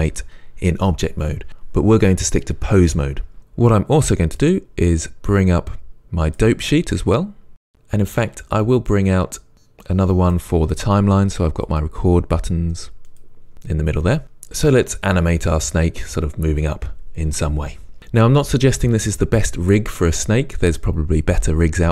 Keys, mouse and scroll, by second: 6.8 click, 8.3 click, 11.7 click, 14.2 shift+middle click.